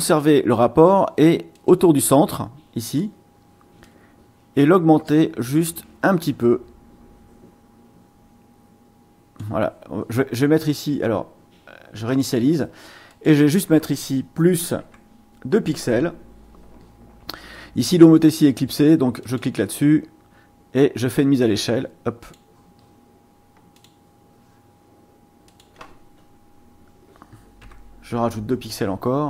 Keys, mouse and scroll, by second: 1.5 click, 2.8 click, 3.8-9.6 drag, 12.1 click, 13.1 click, 14.8 KP_Add, 15.7 KP_2, 19.2 click, 22.2 click, 23.7 click, 25.5 click, 27.6 KP_Add, 28.1 KP_2.